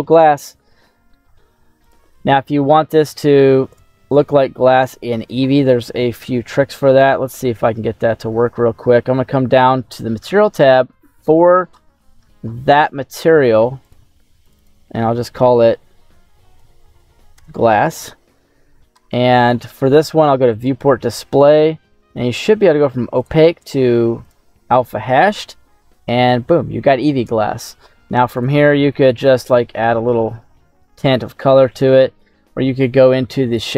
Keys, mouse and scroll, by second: 3.7 click, 4.4 middle click, 5.0-6.2 scroll down 2, 6.6-8.3 scroll down 12, 11.3-13.7 scroll up 8, 13.7 scroll up 1, 13.7 click, 14.4-17.3 drag, 17.0 s, 18.5-20.1 scroll down 7, 20.1-20.4 scroll down 1, 20.4 click, 20.8-22.5 scroll down 7, 22.5-23.1 scroll down 1, 23.1-24.6 drag, 25.6-26.1 scroll up 5, 28.2 click.